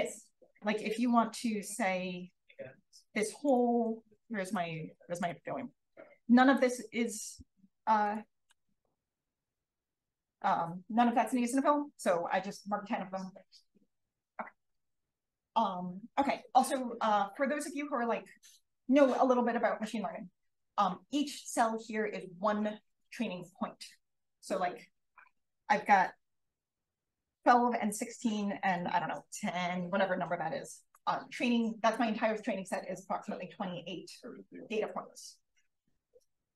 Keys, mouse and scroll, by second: 2.9 space, 3.1 click, 3.9 click, 4.9 click, 8.0 click, 8.7 b, 9.7 click, 27.4-33.9 drag.